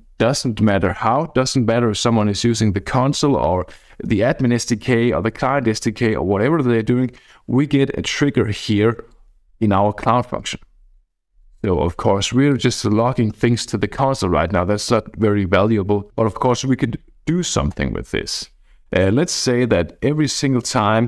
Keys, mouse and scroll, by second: 8.6-11.8 drag, 12.5 click.